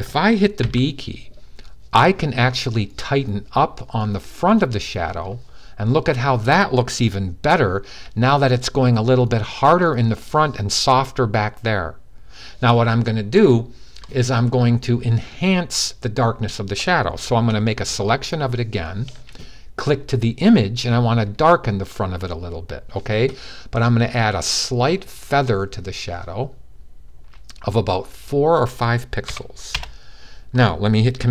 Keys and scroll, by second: 0.3 b, 29.0 5.